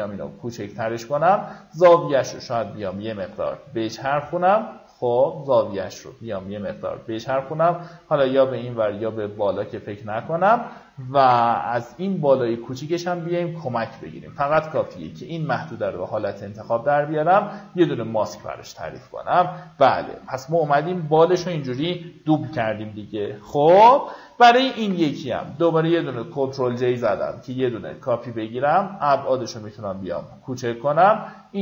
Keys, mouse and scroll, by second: 1.1-6.6 drag, 7.5-10.9 drag, 10.9 Return, 13.8 ctrl+click, 15.2 click, 19.5 alt+scroll down 1, 20.5-21.2 alt+scroll up 2, 22.1 ctrl+click, 26.5-31.6 shift+drag.